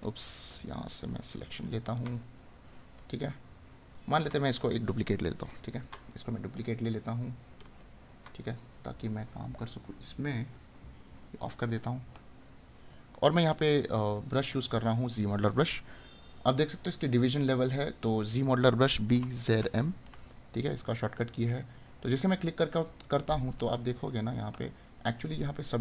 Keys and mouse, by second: 2.1 right click, 6.3 right click, 12.2 right click, 14.2 right click, 24.3 right click.